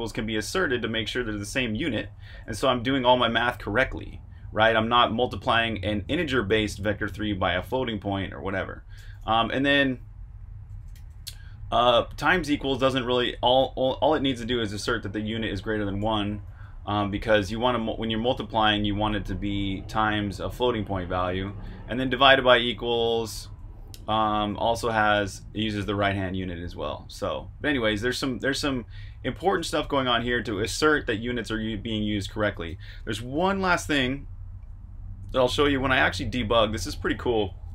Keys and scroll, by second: 1.6-3.8 typing, 10.9 shift+v, 15.8 Escape, 15.9-18.3 typing, 20.9 Escape, 21.1-29.6 typing, 32.6 ↻, 33.3 super+Tab.